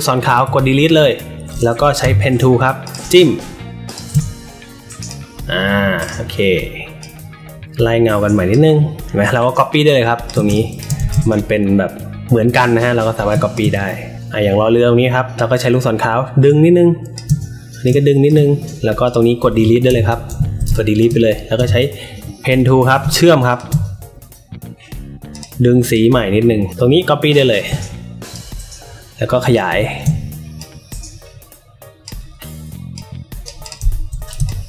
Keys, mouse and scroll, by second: 0.3 Delete, 1.9 p, 2.8 click, 3.8 shift+click, 4.9 click, 5.9 click, 6.9-8.4 drag, 9.0-10.2 alt+shift+drag, 10.4 space, 10.5 click, 11.0-13.2 alt+shift+drag, 13.4-15.3 alt+shift+drag, 16.3-17.0 shift+drag, 17.8 shift+click, 19.0 click, 19.8 Delete, 20.6 space, 20.6 click, 21.5 p, 22.5 click, 23.4 shift+click, 25.3 click, 25.5 click, 26.7 alt+shift+click, 28.3-29.4 shift+drag, 30.5-32.0 drag, 32.9 click, 33.5 click, 34.3 space, 34.4 click.